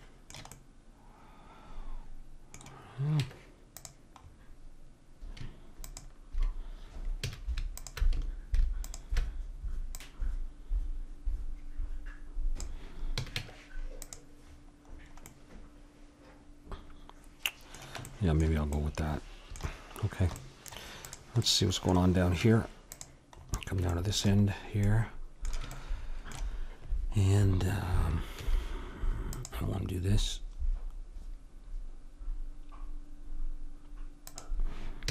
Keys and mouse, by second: 3.2 Tab, 5.8-7.6 drag, 7.2 a, 10.4-11.8 drag, 13.2 a, 13.4 Tab, 14.5-17.3 middle drag, 18.1 middle click, 21.1-23.1 middle drag, 22.3 Tab, 28.4 ctrl+r, 35.0 a.